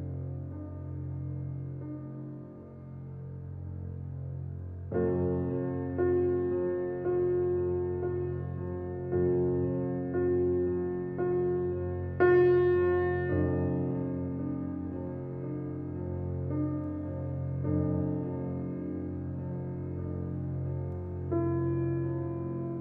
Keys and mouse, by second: 1.8-2.1 drag, 2.8 Tab, 3.6 Tab, 4.0 click, 4.8 shift+click, 5.3 e, 6.8 e, 8.3 f, 9.1 Tab, 10.2-10.7 drag, 11.4 click, 13.4-14.6 drag, 16.7 click, 22.5 click.